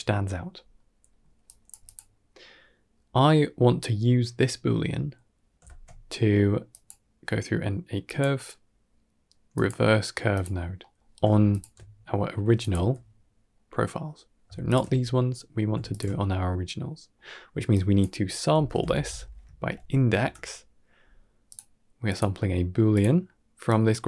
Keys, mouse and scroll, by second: 0.3-1.3 scroll down 5, 0.6-0.9 middle drag, 1.3 drag, 1.8 g, 2.4 middle click, 3.2 middle click, 3.5 scroll up 1, 5.5 shift+a, 10.7 middle click, 11.4 alt+shift+click, 12.5 drag, 12.7 x, 13.4-13.7 middle drag, 14.5 alt+shift+click, 15.2 middle click, 15.8 alt+shift+click, 16.6-17.0 middle drag, 17.7-21.4 drag, 19.5 Down, 21.9-22.9 drag, 23.5-24.0 drag.